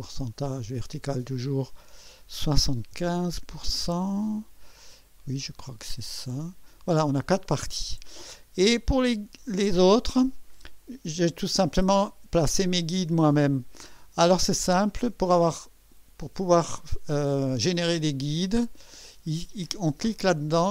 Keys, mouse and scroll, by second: 1.2 click, 2.4 7, 2.6 KP_5, 3.0 KP_Enter, 6.2 click, 18.5-20.7 drag.